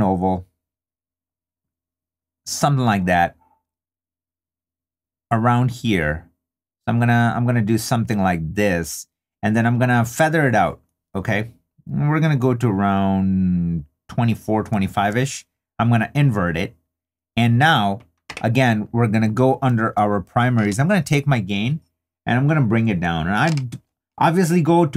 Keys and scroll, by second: 14.7 3.